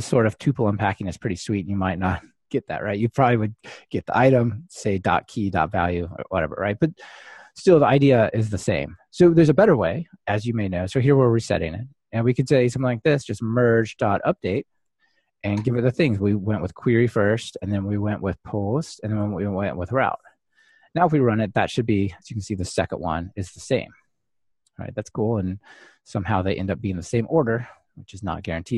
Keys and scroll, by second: 13.8 Return, 17.2 Return, 17.5 super+d, 18.3 ctrl+alt+shift+Left, 18.9 super+d, 19.3 ctrl+alt+shift+Left, 20.7 ctrl+r, 26.8 super+x.